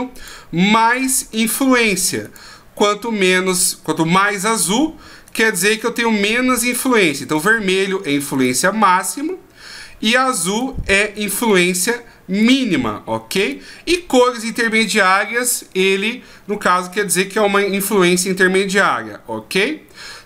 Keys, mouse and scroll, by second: 0.1 right click, 2.2 right click, 3.5 right click, 5.3 right click, 6.6 right click, 7.3 right click, 8.4 right click, 10.5 right click, 11.5 right click, 12.4 right click, 13.4 right click.